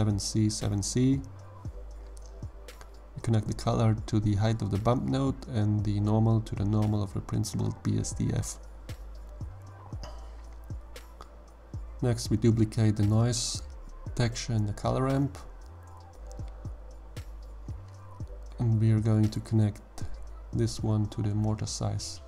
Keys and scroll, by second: 0.0-0.1 typing, 0.5 Return, 9.5 g, 12.4 shift+d.